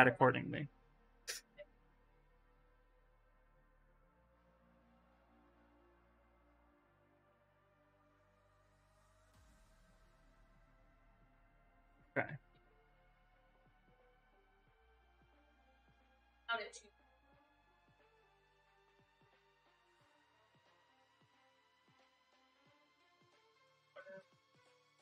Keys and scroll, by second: 0.7 ,, 7.0 s, 10.8-11.9 typing, 13.1 s, 24.6 s.